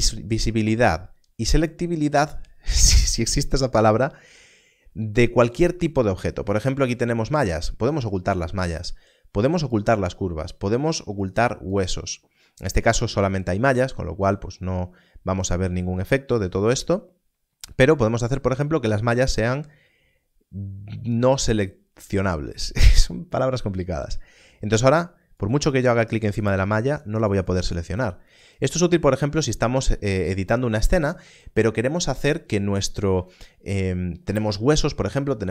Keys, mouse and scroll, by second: 7.4 click, 11.1 click, 19.5 click, 24.8 click, 31.0 click.